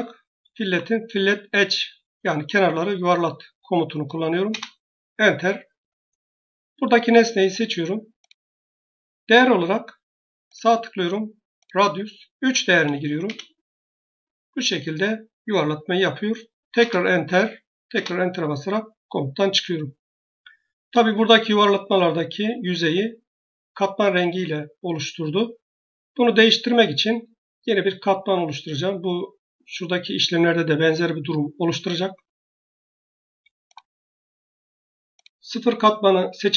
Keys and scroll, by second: 0.3 typing, 4.3 Return, 12.5 3, 13.1 Return, 21.4 Return, 36.1 Escape.